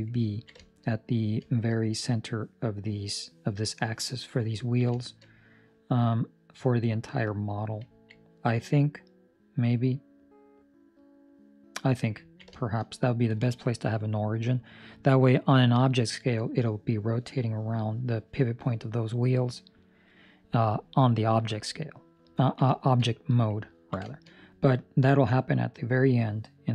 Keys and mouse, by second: 0.2 ctrl+middle click, 0.5 shift+middle click, 0.8 middle click, 1.4 shift+middle click, 4.5 ctrl+middle click, 4.8 shift+middle click, 5.2 middle click, 7.8 ctrl+middle click, 8.1 middle click, 12.2 ctrl+middle click, 12.5 shift+middle click, 12.8 middle click, 22.3 ctrl+middle click, 22.6 shift+middle click, 23.7 ctrl+middle click, 24.0 shift+middle click, 24.3 middle click.